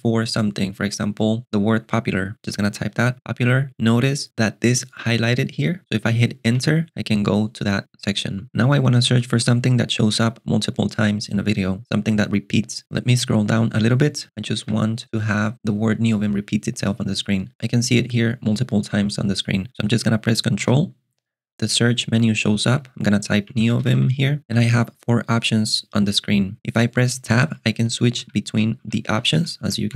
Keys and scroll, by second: 2.8-3.7 typing, 6.5 Return, 14.3 ctrl+alt+shift+super+6, 14.6 j, 20.7 alt+super+space, 23.1-24.4 typing, 26.6 Tab, 27.5 Tab, 29.1 Tab.